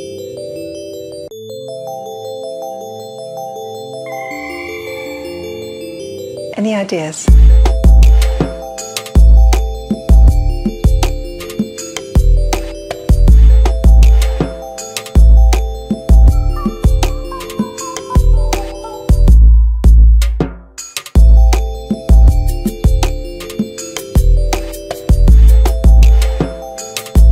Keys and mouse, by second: 0.0 ctrl+s, 1.2 KP_3, 1.8 click, 1.8 g, 2.0 g, 2.5 KP_3, 3.5-4.5 drag, 4.6 KP_3, 5.3 g, 5.4 g, 6.3-7.9 shift+middle drag, 7.9 KP_3, 8.3 shift+z, 8.6 g, 9.3 i, 9.4-10.6 drag, 10.6 KP_3, 12.5 middle drag, 12.8 middle click, 12.9 click, 13.2 click, 13.3 middle click, 13.4 drag, 13.8 click, 14.4 click, 15.6 click, 15.8 click, 16.4 drag, 16.9 click, 17.2-18.7 drag.